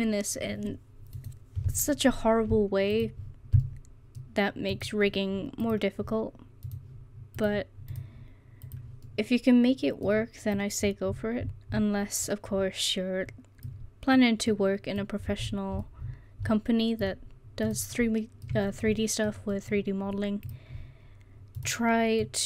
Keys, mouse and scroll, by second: 3.7-4.8 middle drag, 9.1 middle click, 9.6 middle click, 14.2 middle click, 15.5-16.4 scroll down 1, 18.0 middle click.